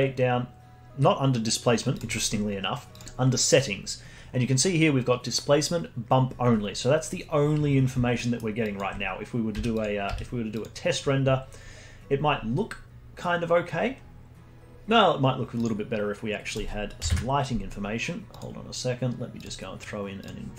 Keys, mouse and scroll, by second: 1.9-3.2 drag, 3.2-4.9 scroll down 14, 8.1 alt+middle click, 8.6 alt+click, 9.5 z, 11.0 z, 15.5 click, 16.5-18.3 drag, 19.4-20.5 drag.